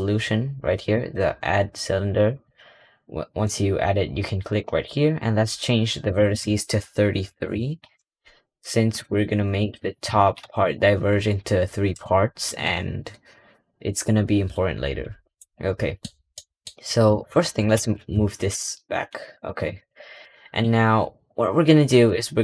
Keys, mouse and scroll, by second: 0.8-3.8 drag, 5.9-8.9 drag, 9.5 click, 10.3 g, 13.0 scroll down 1, 14.1 scroll down 1, 14.4-15.0 scroll up 3, 15.0 scroll down 2, 15.2-17.0 middle drag, 17.0 click, 17.3-17.6 scroll down 1, 17.6 g, 19.6 click, 20.1-21.2 middle drag, 21.2-22.0 scroll up 2, 22.0-22.4 middle drag.